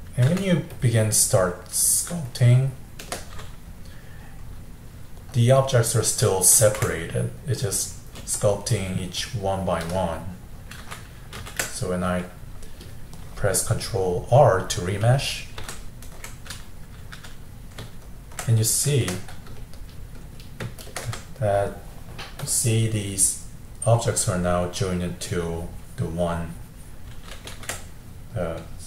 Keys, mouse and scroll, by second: 0.3 f, 2.3-3.9 shift+drag, 3.9-6.6 middle drag, 6.6 ctrl+z, 7.2-8.4 middle drag, 8.4-10.3 shift+drag, 10.3 middle click, 10.9 ctrl+z, 11.4 ctrl+z, 11.8-15.7 middle drag, 15.7 ctrl+r, 16.7 middle click, 17.2 f, 17.9-20.7 ctrl+middle drag, 20.7 shift+space, 21.1 2, 22.4-27.5 drag, 27.5 ctrl+z.